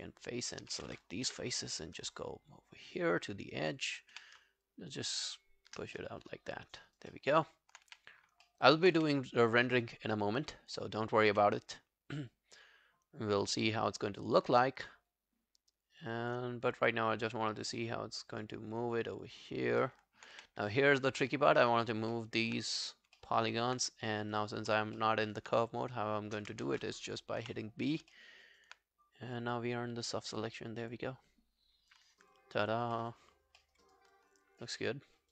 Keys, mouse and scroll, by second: 1.3 right click, 3.9 double click, 4.1 click, 4.7 shift+click, 6.0 alt+middle click, 6.4 alt+scroll down 1, 6.6 alt+click, 6.9 alt+right click, 7.1 alt+middle click, 7.5 alt+scroll down 1, 7.9 w, 8.2 scroll up 1, 8.2 w, 8.5 alt+middle click, 8.6 alt+scroll down 1, 8.8 alt+scroll up 1, 9.0 w, 9.2 right click, 14.5 w, 19.8 alt+middle click, 20.4 w, 20.6 right click, 21.5 scroll down 4, 21.8 alt+click, 22.2 alt+middle click, 23.2 alt+middle click, 23.4 alt+right click, 24.4 alt+click, 25.0 alt+middle click, 25.2 alt+right click, 26.7 ctrl+z, 27.4 b, 27.9 scroll down 3, 28.1 alt+middle click, 28.5 alt+right click, 32.0 scroll down 3, 32.3 alt+click, 33.0 alt+middle click, 33.3 alt+scroll down 1, 33.6 alt+middle click, 33.9 alt+right click, 34.2 alt+click, 34.8 alt+middle click, 35.1 alt+scroll up 2.